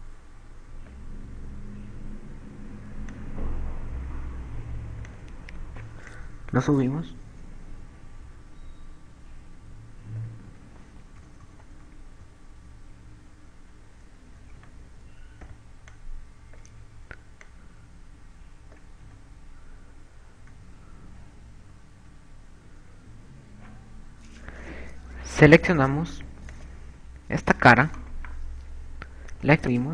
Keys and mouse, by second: 0.2 click, 4.2 click, 6.4 click, 11.6 a, 12.0 KP_4, 12.1 KP_4, 13.4 KP_2, 14.1 KP_4, 15.8 KP_4, 15.8 z, 16.5 b, 18.8 click, 20.4 a, 20.8 z, 22.8 KP_6, 23.2 KP_6, 23.8 KP_8, 24.7 KP_8, 27.7 click, 28.8 right click.